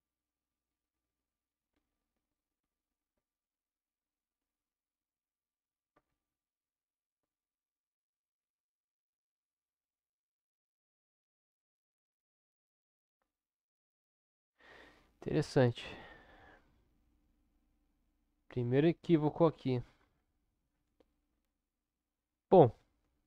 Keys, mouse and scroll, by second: 0.8 click, 3.1 Tab, 4.2 click, 6.1 alt+a, 9.1 click, 11.2-12.4 middle drag.